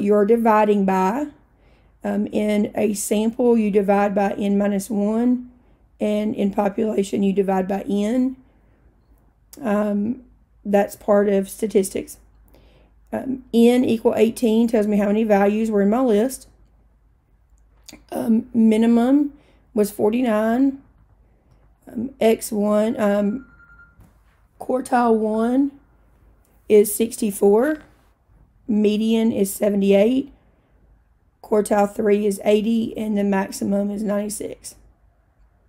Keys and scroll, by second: 20.2 Down, 20.5 Down, 20.8 Down, 21.0 Down, 21.7 Down.